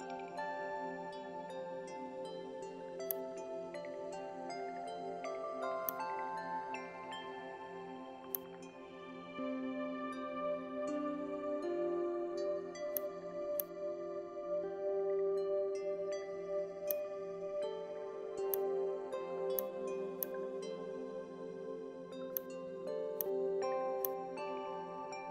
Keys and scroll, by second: 5.4 alt+space, 9.6 Delete.